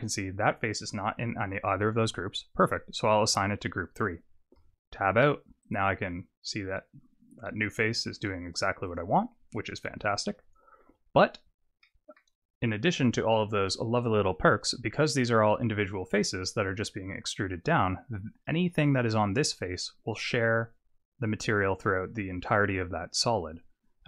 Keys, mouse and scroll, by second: 0.6 click, 2.6 click, 3.3 click, 4.6 Tab, 5.6 click, 9.0 click, 10.2 click, 11.8 middle click.